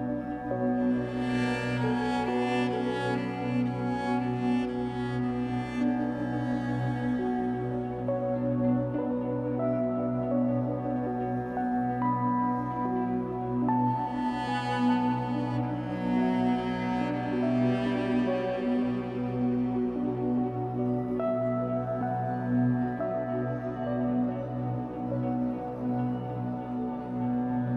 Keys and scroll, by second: 4.3 2, 5.6 alt+c, 7.5 Escape, 7.9 3, 9.9 1, 11.9 w, 14.3 ctrl+z, 15.0 r, 17.0 Escape, 17.5 3, 21.6 b, 24.1 b.